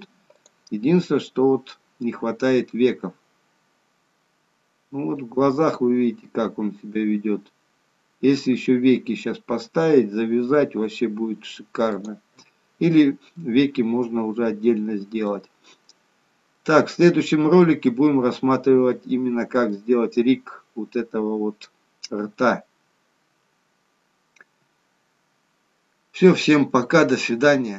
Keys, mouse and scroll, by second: 0.8 middle click, 3.0 g, 12.3 middle click, 13.8-14.5 scroll down 2, 14.3 middle click, 15.7-16.2 scroll up 1, 16.2-16.6 scroll down 1, 16.6 middle click, 18.5 middle click, 20.8-21.4 scroll down 2, 22.2 middle click.